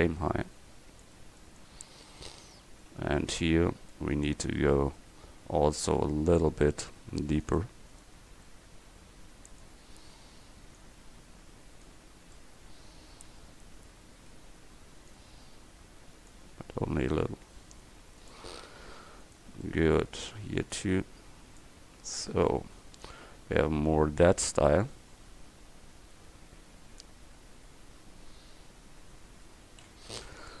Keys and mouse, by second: 1.9-3.6 middle drag, 4.2 click, 20.8 middle click, 22.0 Tab, 30.2 KP_1.